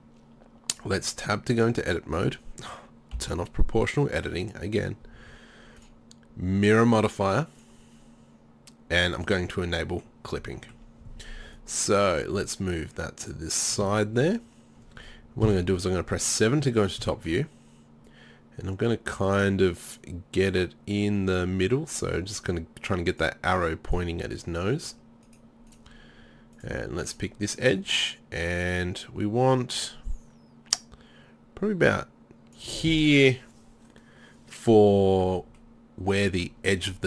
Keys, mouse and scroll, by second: 2.2 click, 3.2 o, 5.8 click, 15.5 KP_7, 36.2-37.0 middle drag.